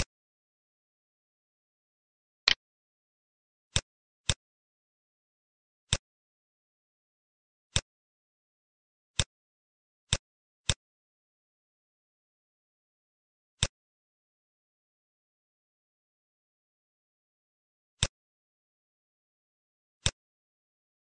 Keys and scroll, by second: 11.3 shift+Page_Down.